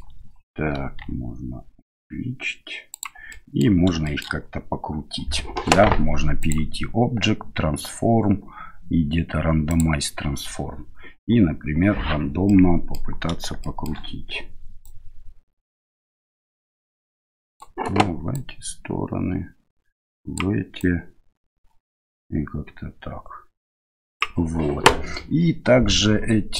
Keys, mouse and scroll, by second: 1.0 s, 3.4 middle click, 4.0 shift+middle click, 6.4-9.8 drag, 12.5-13.1 middle drag, 13.6 shift+middle click, 14.9-17.7 drag, 18.6-20.5 drag, 21.0-24.3 drag.